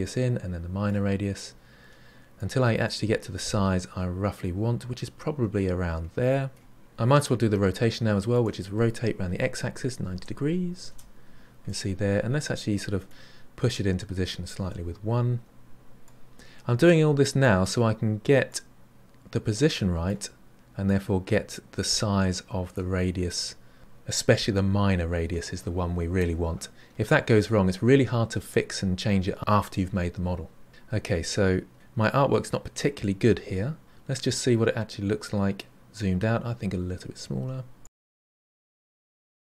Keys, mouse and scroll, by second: 2.8-5.8 middle drag, 8.3-11.3 drag, 11.6-14.6 middle drag, 14.6 KP_1, 16.1-23.8 drag, 33.8-35.3 scroll down 6, 37.8-39.5 drag.